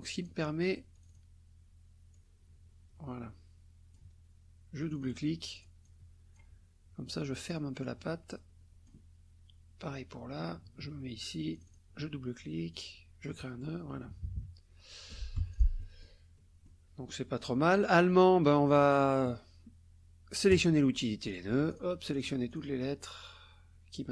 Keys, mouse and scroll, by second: 0.9 click, 2.1-4.1 drag, 4.8 click, 5.4 click, 7.5-9.1 drag, 11.5 click, 12.7 click, 14.1 KP_Subtract, 14.9 click, 15.4 F1, 15.5 click, 16.4 click, 17.4 click, 18.0 click, 18.5 click, 20.5 click, 21.3 click, 21.7 shift+click, 22.1 shift+click, 22.5 shift+click.